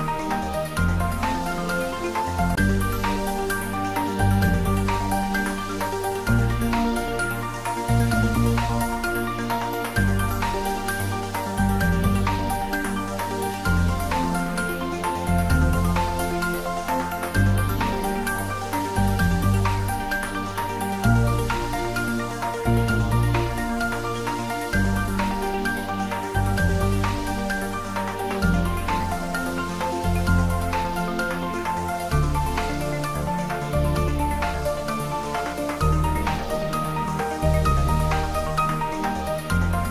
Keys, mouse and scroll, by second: 1.5-5.0 scroll up 1, 5.0 click, 5.4-7.3 middle drag, 7.3-8.4 scroll down 1, 8.4 click, 9.3 scroll down 1, 9.9-11.2 middle drag, 11.2 scroll up 1, 12.3 click, 13.3 shift+click, 14.3 e, 16.9 x, 18.2 y, 19.4 click, 19.8 middle click, 21.1-22.0 scroll up 1, 22.9 s, 23.2 z, 26.7 click, 27.4 g, 27.8 z, 30.4 click, 30.7-31.1 scroll up 1, 34.4 right click, 35.6 click, 37.8 scroll up 1, 39.2 1.